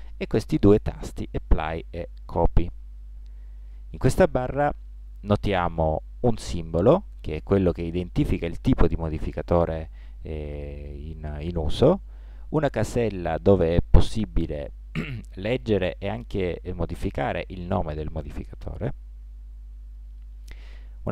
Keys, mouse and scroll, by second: 12.8-14.6 drag.